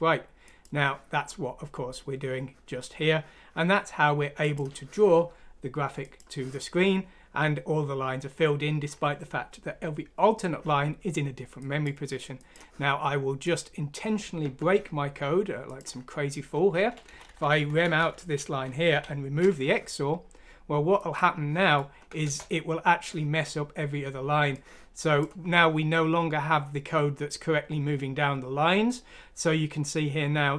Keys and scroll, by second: 17.1 Down, 17.2 Down, 17.4 Down, 17.5 Down, 17.7-18.3 Down, 18.0 Home, 18.9 typing, 21.6 F6, 22.2 Return.